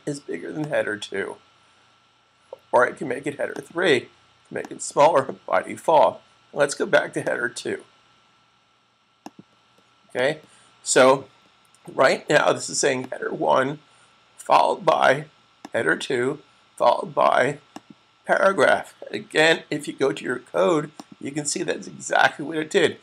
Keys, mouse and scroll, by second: 3.3 click, 7.1 click, 19.1 super+s, 20.8 click.